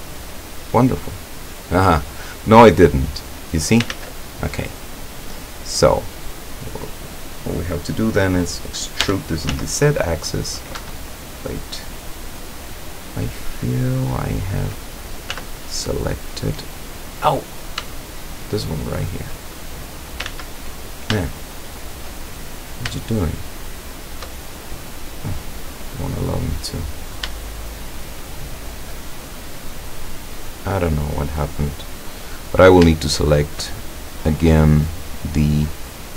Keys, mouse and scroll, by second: 2.4-2.8 scroll up 2, 2.9-4.0 middle drag, 3.8 ctrl+click, 4.0 ctrl+z, 4.4-5.7 ctrl+drag, 6.2 click, 9.0 e, 9.5 z, 10.0 scroll up 1, 10.8 Escape, 11.2-15.0 drag, 15.3 z, 15.8-17.4 drag, 18.2 shift+right click, 18.8 shift+right click, 20.3 ctrl+z, 21.3 shift+click, 22.2-22.8 shift+scroll up 1, 23.3 shift+right click, 23.8 shift+right click, 24.6 shift+scroll down 1, 25.0-27.3 middle drag, 27.7 shift+right click, 28.2 shift+right click, 29.2 shift+right click, 30.3 scroll down 2, 30.7-32.2 middle drag, 32.3-32.6 scroll up 2, 33.1 shift+right click, 34.4 scroll up 1, 34.4-35.2 middle drag.